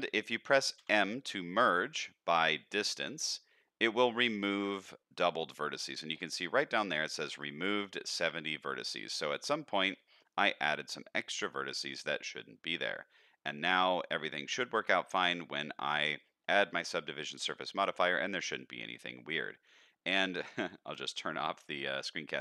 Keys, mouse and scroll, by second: 1.1 m, 8.6 middle click, 9.6 shift+middle click, 10.2-11.4 middle drag, 11.6 middle click, 12.7 middle click, 13.2 middle click, 14.1 middle click, 15.0-16.2 middle drag, 16.5 middle click, 17.4-18.5 middle drag, 18.9 middle click, 20.9 n.